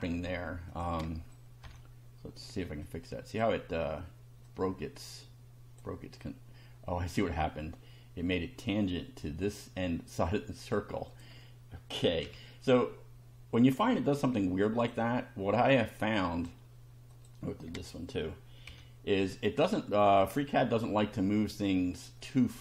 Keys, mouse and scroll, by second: 0.7 click, 1.6 Delete, 2.8 click, 4.5-6.0 drag, 11.1 click, 12.2 Delete, 14.0 click, 16.0 click, 17.1 click, 17.7 click, 18.7 Delete, 21.1-22.3 shift+middle drag.